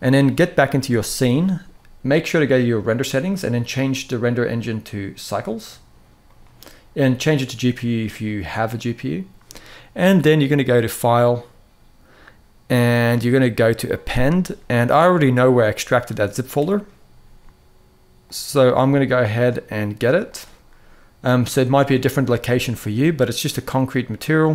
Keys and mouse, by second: 2.7 click, 4.2-5.1 drag, 6.0-7.5 drag, 10.7-14.1 drag.